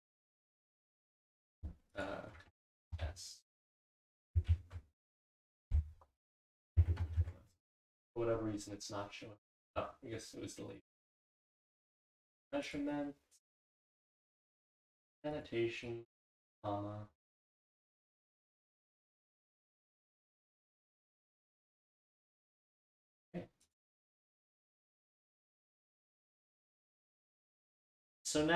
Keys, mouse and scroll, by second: 1.9 click, 8.7 ctrl+s, 10.8 click.